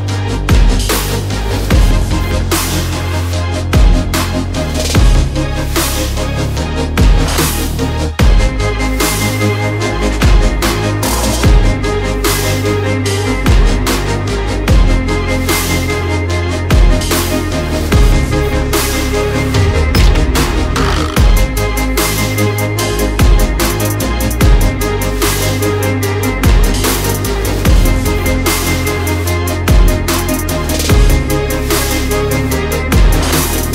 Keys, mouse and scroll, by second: 1.8 click, 4.7-5.1 alt+scroll up 1, 5.1 click, 6.9 click, 7.2 click, 12.4 click, 17.2 click, 18.5 shift+click, 18.9 right click, 19.4 click, 23.5 click, 25.6 click, 33.4 ctrl+z, 33.6 click.